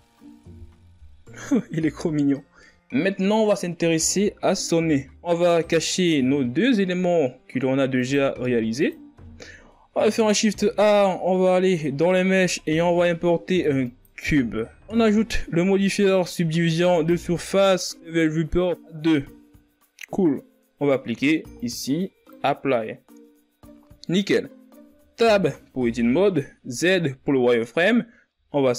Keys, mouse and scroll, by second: 2.7 z, 3.0-3.3 scroll down 4, 3.3 Tab, 3.6 scroll down 6, 3.9 a, 5.5 z, 10.9 click, 11.7 click, 13.1-13.6 scroll down 3, 13.6 shift+a, 17.7-20.5 drag, 21.7-27.6 drag, 27.8 Tab.